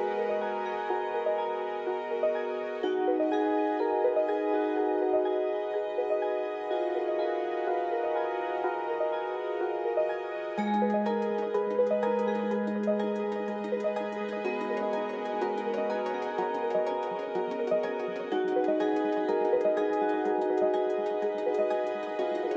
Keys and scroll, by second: 7.5 ctrl+z, 8.9 KP_1.